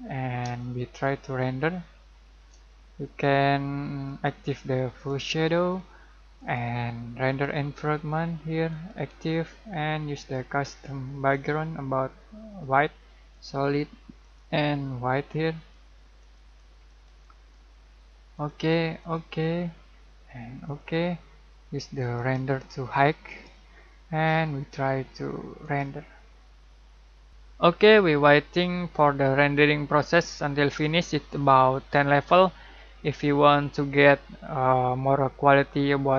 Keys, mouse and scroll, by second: 0.0 middle click, 0.6-4.1 shift+middle drag, 4.1-17.3 drag, 25.7 click.